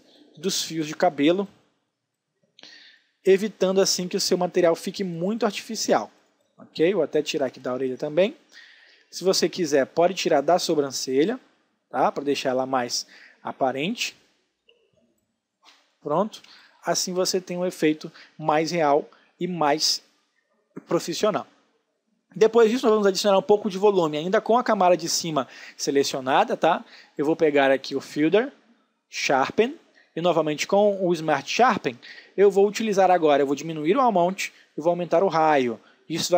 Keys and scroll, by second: 7.8 ctrl+alt+space, 8.9 space, 13.1 space, 16.5 ctrl+alt+space, 17.5 space.